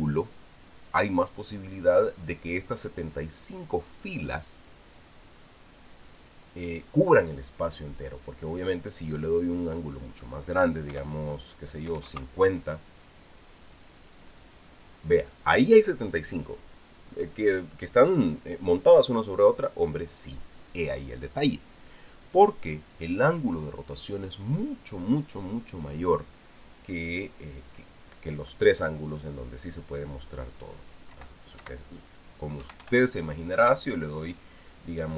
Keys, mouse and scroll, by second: 10.8 click, 11.7 BackSpace, 12.7 KP_5, 12.9 KP_0, 14.6 click, 30.5 click, 31.9 BackSpace, 32.4 Delete, 33.4 KP_1, 33.6 KP_8, 34.4 KP_Enter.